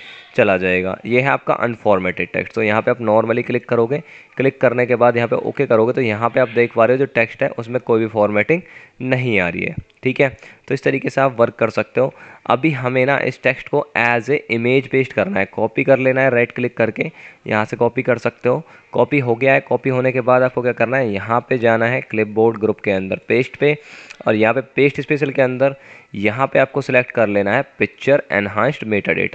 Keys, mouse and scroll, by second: 12.3 F9, 16.8 right click, 19.6 typing.